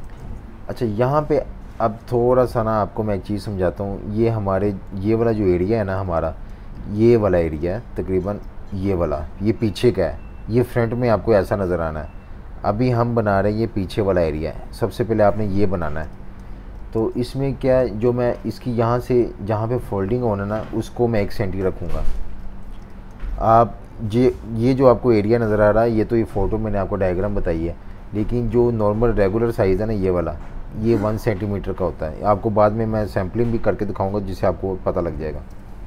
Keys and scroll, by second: 0.0 typing, 1.2 v, 6.0-8.3 typing, 15.9-17.8 typing, 21.7-22.6 typing, 34.9 super+-, 35.1 super+-.